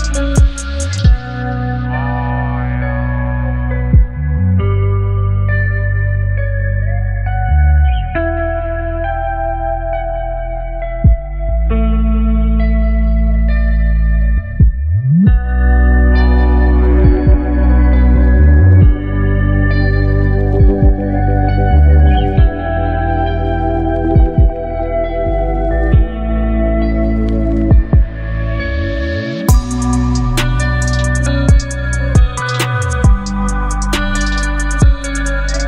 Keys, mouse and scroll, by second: 1.2 click, 2.8 alt+scroll up 1, 4.0 space, 4.1-4.8 click, 4.5 space, 5.4 b, 8.1-9.4 drag, 12.6-12.9 click, 13.3-13.7 alt+scroll up 2, 14.0-15.3 alt+right click, 15.3 space, 15.4-16.0 click, 15.8 space, 16.2-17.1 alt+right click, 17.3-18.2 drag, 22.9 v, 23.4 ctrl+0, 26.5 click, 35.1-35.6 drag.